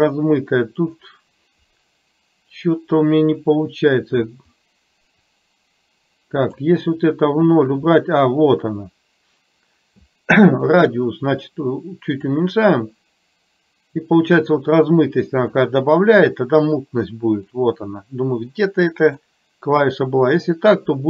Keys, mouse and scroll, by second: 5.3-6.6 drag, 12.2-15.7 drag, 17.6-19.3 drag.